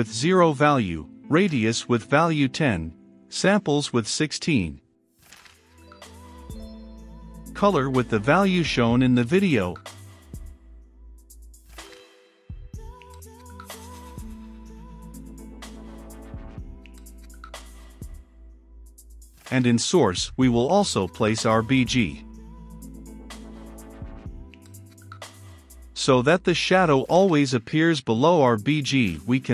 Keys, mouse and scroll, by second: 0.5-1.7 typing, 1.8 Return, 2.8-4.8 typing, 4.4 Return, 5.2 Return, 6.1-7.1 typing, 8.3 shift+~, 12.1 shift+8, 12.5 Return, 13.3 shift+3, 13.6 8, 16.2 middle click, 16.6-19.5 drag, 19.5 Return, 20.1-23.0 typing, 20.2 click, 21.5 Return, 23.5 Return, 24.6-29.5 drag.